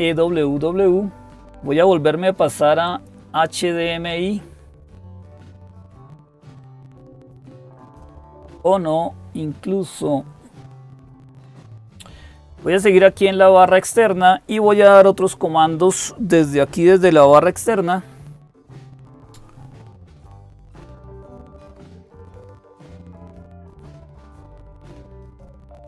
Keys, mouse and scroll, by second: 11.3 click, 13.5 click.